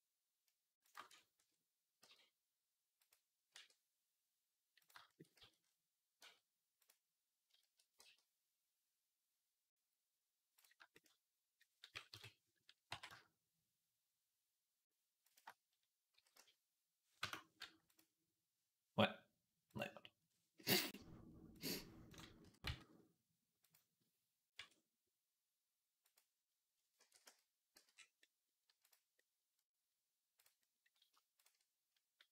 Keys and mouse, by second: 0.7 shift+middle click, 1.2 Tab, 1.8 g, 3.4 r, 4.2-6.4 middle drag, 5.2 z, 6.0 r, 7.8 g, 11.9 KP_3, 12.7 r, 16.0 s, 19.5 click, 19.6-21.4 middle drag, 21.4-23.7 drag, 22.3 s, 23.7-26.6 middle drag, 24.4 r, 26.8 ctrl+a, 27.6 z, 28.0-30.2 middle drag, 28.7 click, 30.2 click, 30.3-32.3 middle drag.